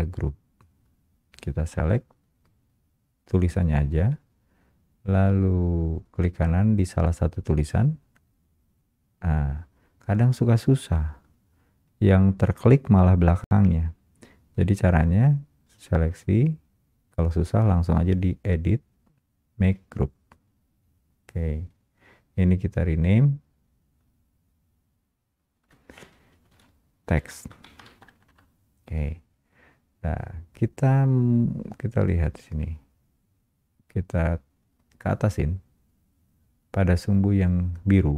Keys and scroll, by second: 28.1 Escape, 28.2 Return.